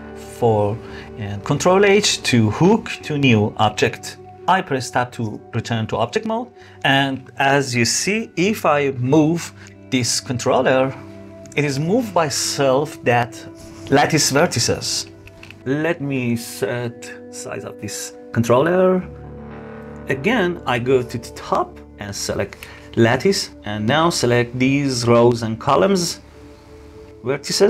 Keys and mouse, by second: 1.1 ctrl+h, 4.6 Tab, 6.2 click, 6.7-8.1 middle drag, 8.8 g, 16.1-19.2 drag, 19.5-19.9 middle drag, 20.7 KP_7, 21.5 click, 22.5 Tab, 23.1 click, 24.6 shift+click, 25.6 shift+click, 26.9 shift+click.